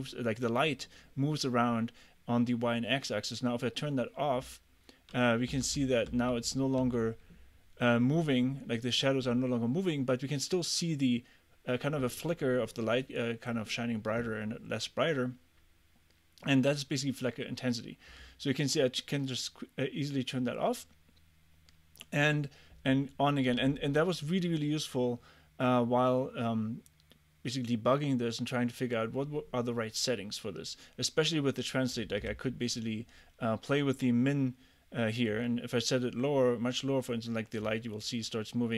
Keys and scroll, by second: 5.6 w, 6.3 a, 6.9 w.